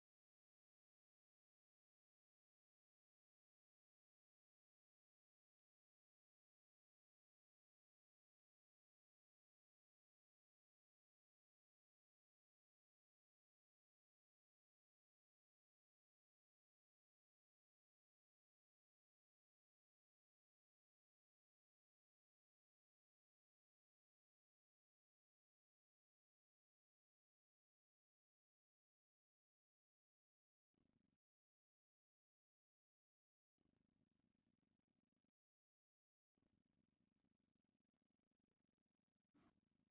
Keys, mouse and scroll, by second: 0.3 shift+v, 1.1 click, 1.4 middle click, 2.3 shift+v, 3.1 click, 3.6 a, 3.7 c, 4.1 right click, 4.3 shift+v, 5.3 click, 5.6 a, 5.7 c, 6.3 right click, 6.6 shift+v, 7.8 click, 8.3 middle click, 8.9 a, 9.0 c, 9.4 right click, 9.7 shift+v, 10.8 click, 11.3 middle click, 12.5 middle click, 14.1 middle click, 15.8 shift+middle click, 16.4 click, 16.6 shift+v, 17.4 click, 18.1 shift+v, 18.6 click, 19.1 middle click, 20.1 click, 20.3 shift+v, 21.0 click, 21.7 shift+v, 22.9 click, 23.2 shift+middle click, 23.7 a, 23.8 c, 24.2 right click, 24.6 shift+v, 26.2 click, 27.1 middle click, 28.4 shift+v, 29.4 click, 30.1 shift+v, 31.1-33.2 drag, 33.9-36.9 typing, 35.6 click, 37.6 click, 38.3 click, 38.7 shift+v, 39.3 click.